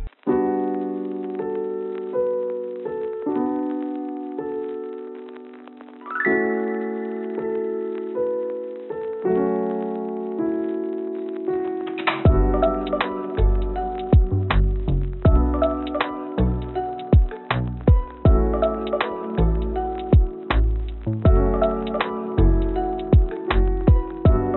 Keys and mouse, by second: 2.6-4.0 drag, 5.3 click, 6.8 g, 9.5 click, 13.9 g, 17.2 click, 17.9 g, 19.6 click, 20.6 g, 24.1-24.5 drag.